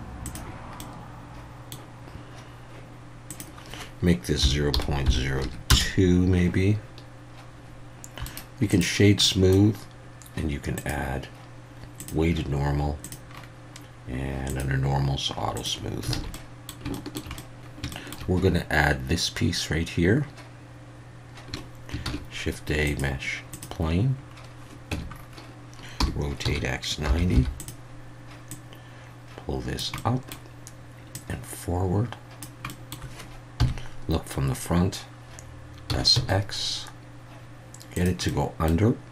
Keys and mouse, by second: 0.8-1.7 middle drag, 3.4-5.9 drag, 8.4 right click, 9.2-9.5 middle drag, 10.8-12.1 drag, 13.0 click, 14.5 click, 15.6 click, 16.2 alt+a, 16.3-16.7 middle drag, 16.9 shift+middle click, 17.3 middle click, 21.5 KP_1, 22.0 shift+a, 24.9 Tab, 26.0 r, 26.4 x, 27.1 9, 27.3 0, 27.6 click, 28.5-29.8 drag, 30.1 middle click, 31.2-32.4 drag, 32.8 middle click, 33.6 KP_1, 35.9 s, 36.1 x, 37.9 click, 38.3 middle click.